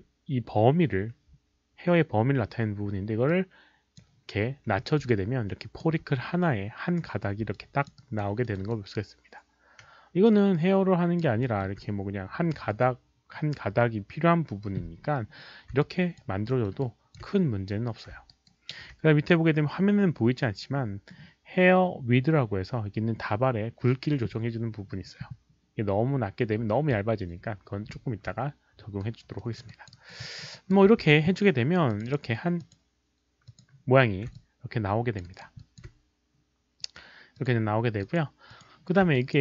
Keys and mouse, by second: 3.2-3.9 drag, 5.0-5.8 alt+drag, 7.5-7.8 alt+drag, 7.9 alt+right click, 8.4 alt+middle drag, 8.6-11.1 alt+drag, 11.4 alt+middle click, 11.5 alt+right click, 15.0 alt+middle click, 15.7 alt+middle click, 15.7 alt+right click, 15.8 alt+click, 15.9 alt+middle click, 15.9 alt+right click, 16.4 alt+middle click, 16.8 alt+click, 18.1 alt+click, 18.1 alt+middle click, 18.2 alt+right click, 18.4 alt+click, 18.4 alt+middle click, 22.2 alt+right click, 22.2 alt+click, 22.2 alt+middle click, 26.6 alt+right click, 26.6 alt+click, 26.6 alt+middle click, 28.9 alt+right drag, 29.3 alt+middle click, 29.6 alt+click, 29.9 alt+right drag, 30.2 alt+middle drag, 30.5 alt+right drag, 31.0 q, 31.9 click, 31.9 alt+right click, 31.9 alt+middle click, 31.9 q, 32.0 click, 32.6 alt+click, 33.4 alt+click, 33.4 alt+right click, 33.4 alt+middle click, 34.3 alt+click, 35.1 alt+middle click, 35.1 q, 35.2 alt+right click, 35.5 alt+click, 37.3 click, 38.0 alt+click, 38.0 alt+right click, 38.0 alt+middle click, 38.0 q, 38.4 alt+click, 38.4 alt+right click, 38.4 q, 39.1 alt+click.